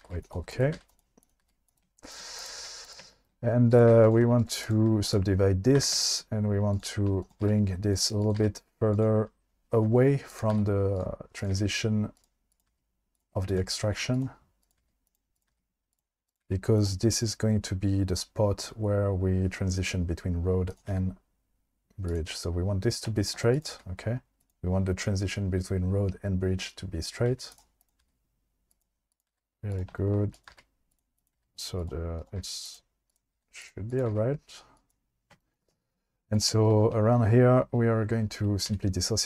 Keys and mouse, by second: 0.0 g, 0.2 click, 0.7 g, 1.4 g, 1.7 click, 2.6 g, 3.7 click, 4.4 right click, 5.9 g, 7.2 click, 7.4 g, 8.4 g, 10.5 g, 11.0 click, 11.4 click, 12.0 g, 12.5 click, 12.7 g, 13.1 click, 13.5 click, 13.6 g, 14.1 click, 14.8 g, 15.4 click, 15.5 g, 15.9 click, 16.3 click, 16.4 g, 20.9 g, 22.1 click, 23.5 click, 23.7 g, 27.3 g, 28.0 g, 29.3 g, 29.9 shift+middle click, 30.3 click, 30.5 g, 31.4 g, 31.8 click, 32.2 click, 32.4 g, 32.6 click, 33.1 click, 33.3 g, 34.1 g, 34.8 click, 36.3 click, 38.7 v.